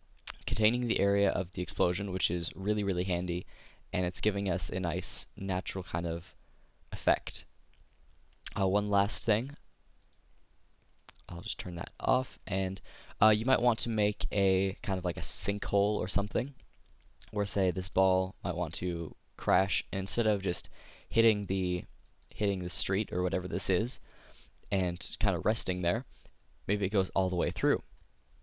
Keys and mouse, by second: 1.9-3.7 drag, 8.4-12.6 drag, 11.0-12.4 right drag, 13.1 click, 13.2 middle click, 14.9 middle click, 15.7 s, 16.4-19.7 drag, 19.7-20.7 middle drag, 22.2 click, 23.0-24.9 middle drag, 25.8-27.7 drag.